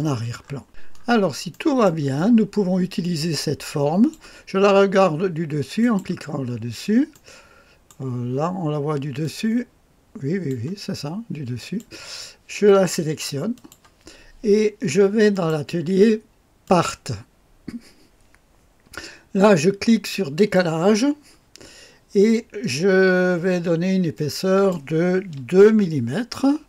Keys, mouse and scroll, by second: 0.0 right click, 0.4 middle click, 0.4-1.9 scroll up 4, 1.5 middle click, 1.9 right click, 2.2-4.9 drag, 5.8 click, 6.5-7.1 scroll up 1, 7.1-8.5 right drag, 9.2-10.5 drag, 11.6 click, 13.6 click, 15.3 click, 16.6 click, 20.4 click, 24.1-25.1 drag, 25.7 KP_2.